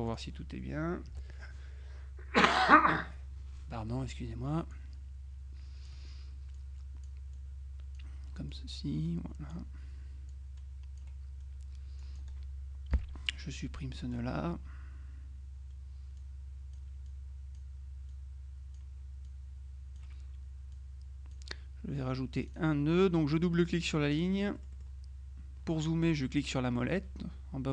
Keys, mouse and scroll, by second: 0.1 click, 1.2 Delete, 4.0 click, 4.8-6.5 drag, 8.6-10.1 drag, 10.4 click, 12.1 click, 13.0 Delete, 16.3 click, 18.2-20.5 drag, 20.8 click, 22.5 click, 24.0-25.4 drag, 24.7 right click.